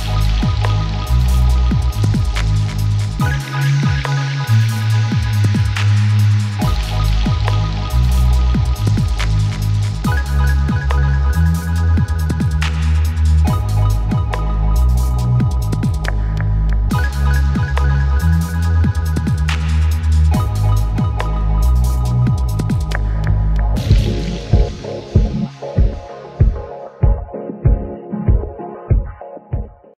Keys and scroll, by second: 10.2 F5.